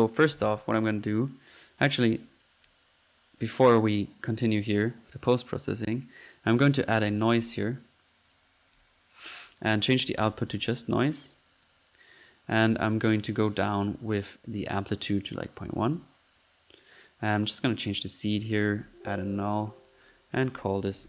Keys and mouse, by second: 0.1-0.8 typing, 1.8 Escape, 2.4 click, 3.0 click, 3.5-3.8 drag, 5.0 click, 6.8-7.5 typing, 8.3 drag, 8.8 drag, 9.9-11.0 drag, 11.7-12.0 drag, 11.9-12.6 typing, 12.1 click, 15.4 click, 16.4 click, 17.7 click, 18.3 click, 19.1 alt+click, 19.6 alt+click, 20.0 alt+click.